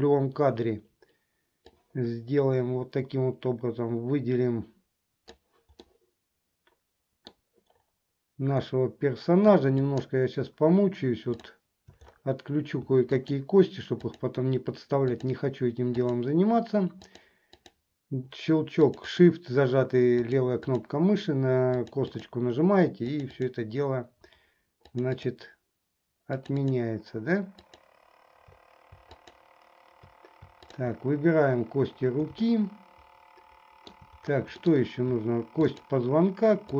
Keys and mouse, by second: 1.7-5.6 drag, 6.1-7.5 middle drag, 9.9 shift+click, 11.4 shift+click, 13.3 shift+click, 14.3 shift+click, 15.2 shift+click, 16.2 shift+click, 17.1 shift+click, 17.7 shift+click, 19.0 shift+click, 20.4 shift+click, 20.8 shift+click, 22.0 shift+click, 23.3 shift+click, 24.9 shift+click, 26.5 shift+click, 27.8 shift+click, 29.3 shift+click, 30.6 shift+click, 32.6-34.1 shift+middle drag, 34.8 middle click, 35.7 shift+click.